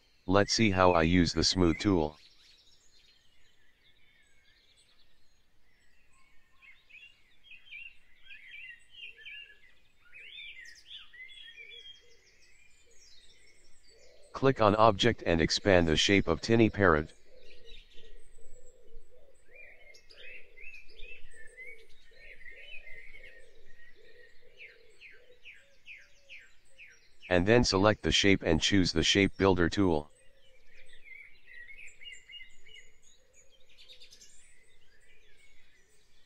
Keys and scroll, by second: 2.1 v, 10.5 ctrl+z, 15.5 Return, 33.9 v.